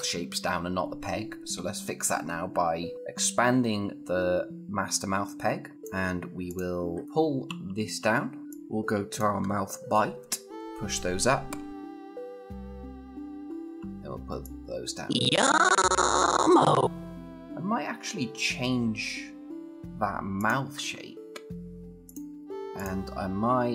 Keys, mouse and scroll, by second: 5.7 click, 7.3 -, 8.4-9.2 click, 9.2-10.0 scroll down 1, 10.5 =, 13.2 -, 14.0 -, 14.2-17.2 click, 17.0 scroll, 20.1 click, 22.3 scroll down 1, 22.5 click.